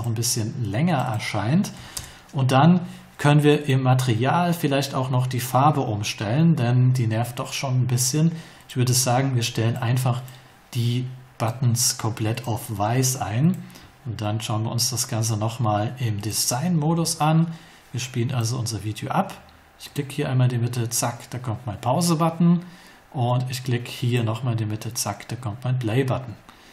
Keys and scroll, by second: 1.7 2, 1.9 Return.